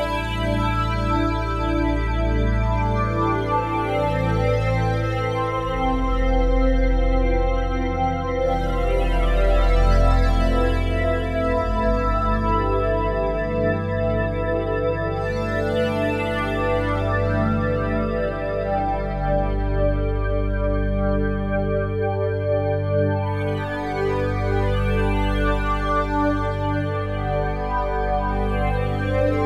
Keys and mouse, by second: 0.1-0.7 alt+shift+drag, 0.9-2.0 ctrl+alt+drag, 2.3 click, 4.3 ctrl+alt+click, 5.7 ctrl+alt+click, 7.1 n, 9.9 click, 11.0-11.9 typing, 12.3 Return, 13.8 click, 14.5-15.2 typing, 15.4 Return, 18.5 click, 19.5 typing, 20.2 Return, 21.9 click, 22.6-23.3 typing, 23.9 Return, 25.2 click, 25.9-26.9 typing.